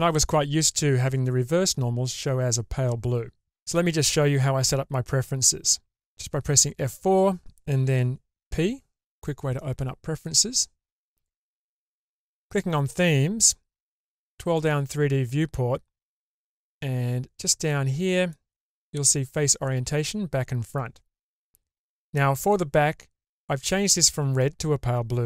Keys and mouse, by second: 6.5 F4.